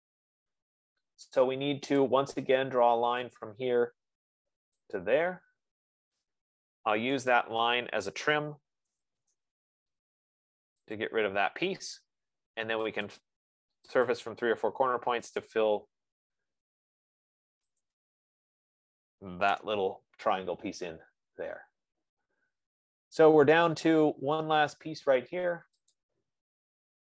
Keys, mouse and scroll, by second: 2.6 click, 3.8 click, 5.3 click, 6.5 Return, 7.8 click, 8.9-10.0 typing, 11.4 click, 13.5-14.3 typing, 13.5 click, 14.5 click, 19.9 Return, 21.0 middle click, 21.2-21.7 scroll, 22.3-22.7 scroll, 23.5 scroll, 24.5 scroll, 26.2 click.